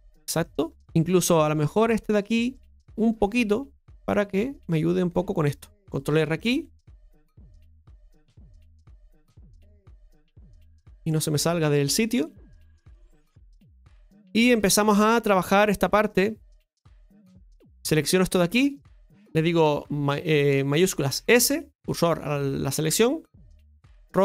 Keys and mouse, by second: 0.8 shift+Tab, 0.8-1.8 middle drag, 2.2 right click, 2.6 alt+shift+right click, 3.7-6.5 drag, 7.3-8.4 drag, 9.1 KP_Divide, 11.0-12.0 middle drag, 13.5 KP_Divide, 14.6 shift+middle click, 15.7 middle click, 16.7 middle click, 18.1 right click, 18.6 alt+shift+right click, 18.7 alt+shift+right click, 21.2 shift+s.